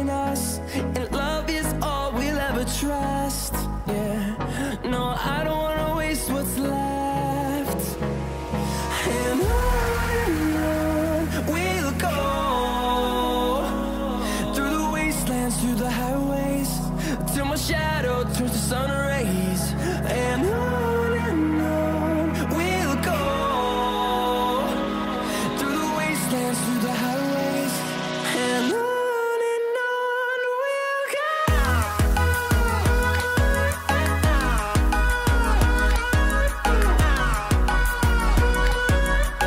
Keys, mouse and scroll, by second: 0.0 typing, 0.4-3.6 drag, 3.6 scroll up 1, 4.3-5.0 scroll down 1, 6.7-12.4 drag, 12.6-16.2 drag, 16.4 click, 18.0-27.0 drag, 27.0-32.8 drag, 33.1-36.4 drag, 36.4-39.4 drag.